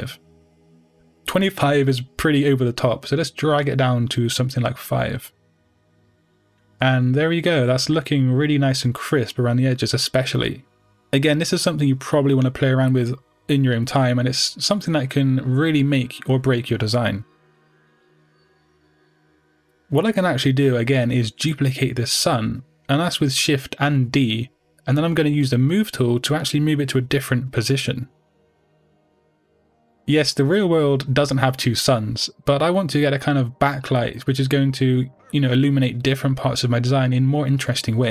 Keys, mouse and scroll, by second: 0.1-9.2 drag, 0.2 Return, 6.3 Return, 7.4-8.2 scroll up 2, 8.2-8.7 scroll up 1, 12.7 click, 15.1 Return, 15.1-23.2 drag, 17.0-17.4 scroll down 2, 17.8-18.4 scroll down 1, 18.4 KP_7, 19.4 scroll down 1, 23.2-25.9 middle drag, 25.1 shift+d, 25.9 right click, 28.5-29.6 drag, 30.7 click, 32.6 click, 35.9-38.1 middle drag, 36.8 KP_0.